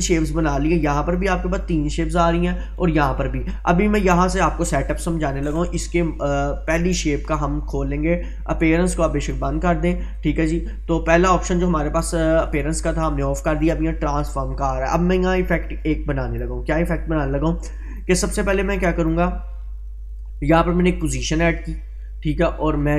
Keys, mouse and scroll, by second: 6.8 click, 9.3 click, 11.6-12.2 scroll down 1, 14.0 scroll down 1, 15.6-16.5 drag.